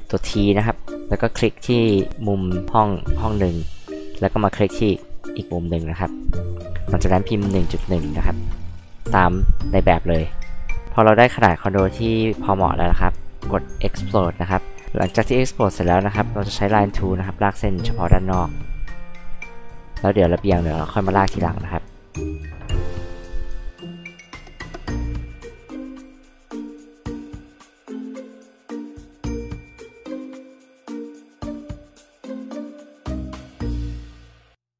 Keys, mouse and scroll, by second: 1.8 Escape, 2.6 click, 2.9 scroll up 2, 3.6 scroll up 2, 6.3 click, 7.5 KP_1, 7.8 KP_Decimal, 8.0 KP_1, 9.5-10.1 scroll up 2, 10.2 Return, 14.1 click, 15.1 ctrl+z, 16.5 click, 19.6 click, 22.4 click, 23.1 click, 24.6 click, 25.1 h, 25.2 drag, 25.7 l, 26.6 click, 27.2 click, 27.8 ctrl+z, 28.3 ctrl+z, 29.2 click, 30.6 click, 32.5 click, 32.8 e, 32.9 click, 33.9 drag.